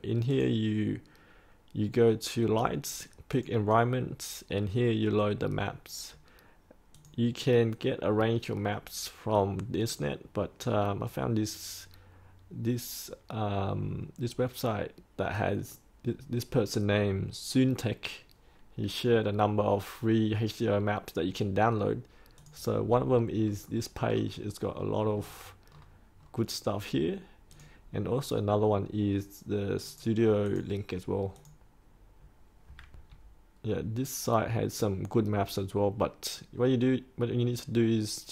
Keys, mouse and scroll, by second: 23.4-23.9 scroll up 1, 24.0-27.5 scroll down 1, 27.5 click, 29.8 right click, 30.4 click, 32.9 3, 33.6-34.6 scroll down 1, 35.0-36.5 scroll up 1, 36.5-38.3 scroll down 1.